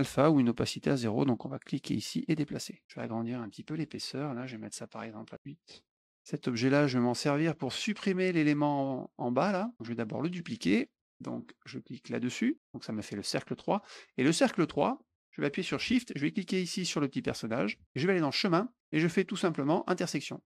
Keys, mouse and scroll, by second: 1.9 click, 4.4 right click, 5.6 click, 10.9 click, 17.1 shift+click, 18.2 click, 20.0 click, 20.4 click.